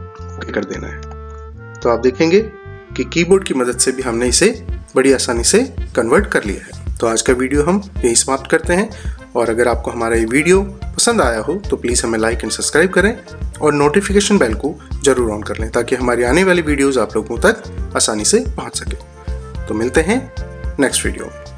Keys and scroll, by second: 1.3 ctrl+z.